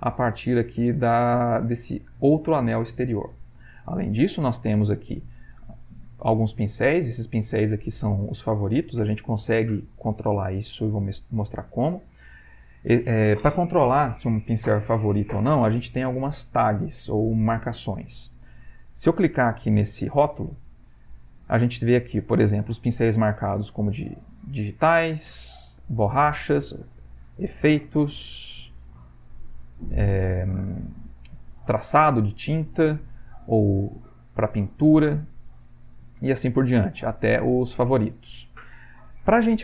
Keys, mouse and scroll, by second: 20.5 click, 23.3 click, 24.7 click, 25.5 click, 26.1 click, 27.2 click, 28.1 click, 29.2 click, 32.8 click, 33.8 click, 35.9 click, 37.6 click.